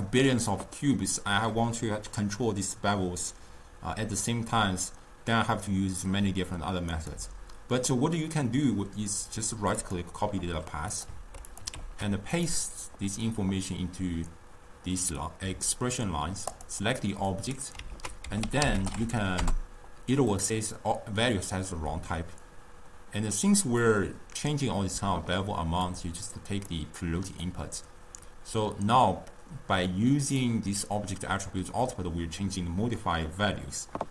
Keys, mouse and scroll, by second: 6.9-10.0 right drag, 11.0 click, 11.5-12.9 drag, 16.6-18.0 drag, 18.0 ctrl+a, 22.5-25.6 drag, 25.9-30.5 drag.